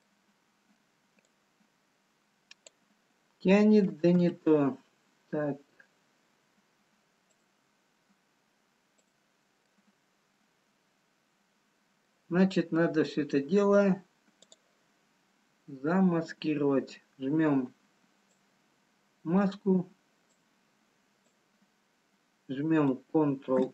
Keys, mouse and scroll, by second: 0.0 middle click, 1.2 click, 4.8 ctrl+z, 6.2-7.2 scroll up 1, 8.8 click, 9.8 middle click, 14.1 scroll down 4, 15.0 click, 18.9 click, 20.4 click.